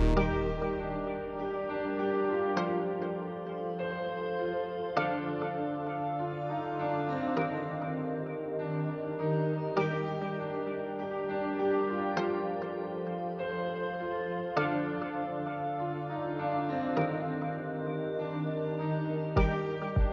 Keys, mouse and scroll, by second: 1.2 click, 2.4 click, 4.6 x, 6.0-7.1 drag, 8.4 g.